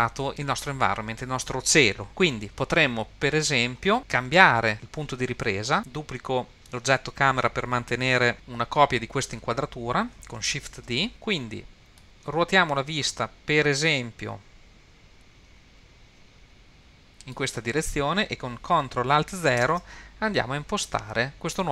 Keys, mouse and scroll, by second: 5.8 click, 10.7 shift+d, 12.0-17.4 middle drag, 19.6 ctrl+alt+KP_0.